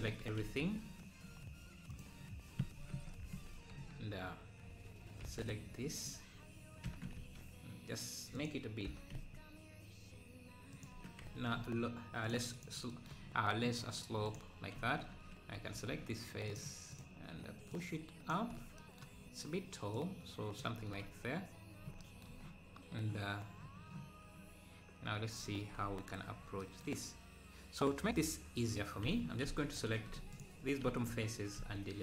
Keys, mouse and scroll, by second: 0.2 z, 0.4 `, 1.9-3.0 drag, 3.0 ctrl+KP_Add, 3.8 KP_1, 6.0 b, 11.0 Tab, 11.4 z, 12.3 click, 12.7 click, 13.9-14.4 scroll down 2, 14.4 click, 15.1 Tab, 16.5 click, 17.8 click, 18.5 scroll down 2, 20.0 click, 20.7 Tab, 25.1-25.4 scroll up 2, 25.8 scroll up 2, 28.0 Tab, 28.1 Tab, 29.5 `, 30.4 shift+click, 30.9 `.